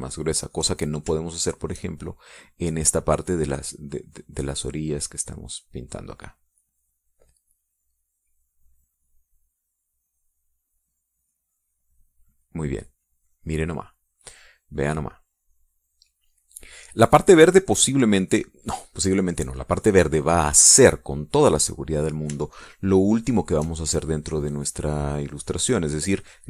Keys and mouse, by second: 1.9 shift+click, 4.4-5.8 drag, 6.0 click, 10.0-14.8 drag, 15.2-17.7 drag, 20.8 click, 23.4-24.4 shift+drag, 24.9-26.4 drag.